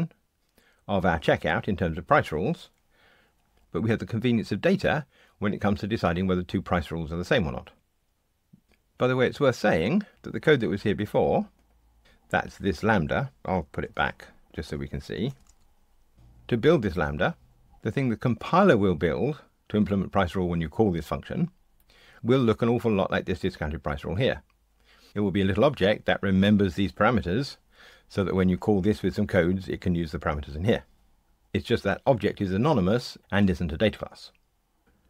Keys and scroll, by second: 13.8 super+c, 15.5 super+v.